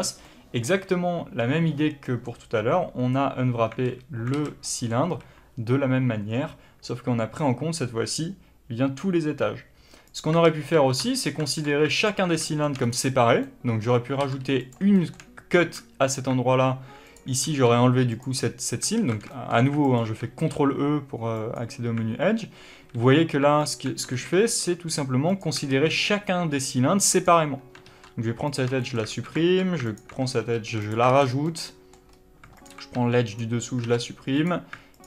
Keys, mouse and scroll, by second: 0.1-10.0 middle drag, 3.8 alt+a, 4.9 a, 10.0 click, 10.3 ctrl+z, 11.9 alt+click, 12.4-17.0 shift+middle drag, 12.7-13.3 scroll up 1, 14.1 ctrl+e, 15.4 alt+a, 17.0 click, 17.4 ctrl+e, 18.9 alt+a, 19.2 shift+middle click, 19.7 alt+click, 20.2 ctrl+e, 22.6 alt+a, 23.5 alt+click, 24.0 ctrl+e, 25.6 alt+a, 27.1 click, 27.7 ctrl+e, 28.7-29.8 shift+middle drag, 29.0 alt+a, 29.8 alt+click, 30.2 ctrl+e, 31.0 alt+a, 31.1 scroll down 1, 31.3-32.5 middle drag, 32.0 scroll up 1, 32.5 alt+click, 33.2 click, 33.7 ctrl+e, 34.8 alt+click.